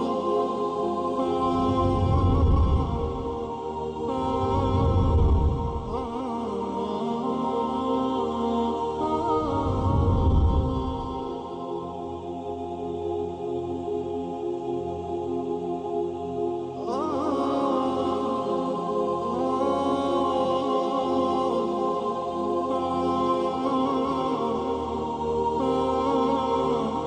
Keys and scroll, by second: 0.9 ctrl+c, 1.1-2.4 typing, 2.1 shift+Down, 3.0 shift+Down, 3.2 shift+Up, 3.8 shift+Up, 4.9 ctrl+c, 7.2 Delete, 8.8 ctrl+g, 9.6 ctrl+alt+space, 11.8 space, 25.1 Down, 25.3 Down, 25.4 Down, 25.5 Down, 26.9 Down.